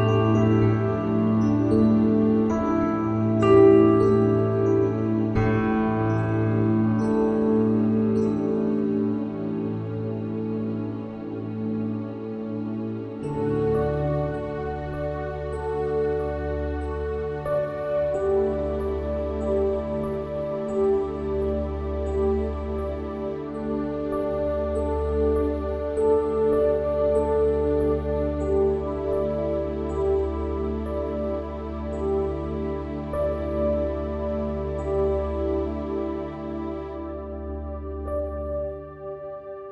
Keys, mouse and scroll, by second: 0.4 click, 1.2 Tab, 5.2 Tab, 5.8 Tab, 7.3 KP_1, 16.6-19.0 middle drag, 19.6-27.5 drag, 28.1-29.3 right drag, 29.3 Tab, 29.7-32.2 middle drag, 32.2-33.9 drag, 34.5-36.0 drag, 36.6 x.